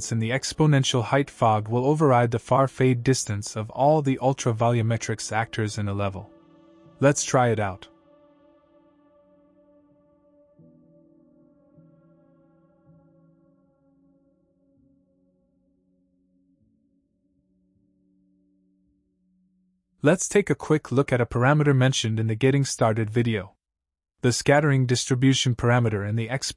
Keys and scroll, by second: 4.3 KP_2, 4.8 KP_0, 8.9 KP_5, 9.4 KP_0, 13.9 KP_6, 14.2 KP_0, 15.5 Return.